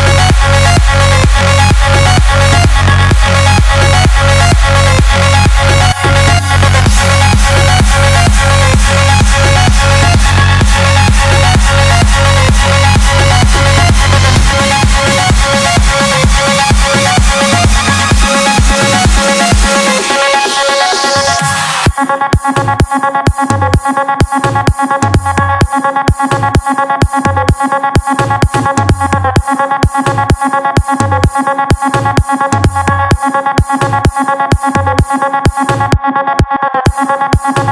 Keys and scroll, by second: 2.9 [, 3.8 [, 4.1 [, 10.0 ctrl+alt+shift+e, 34.0 space.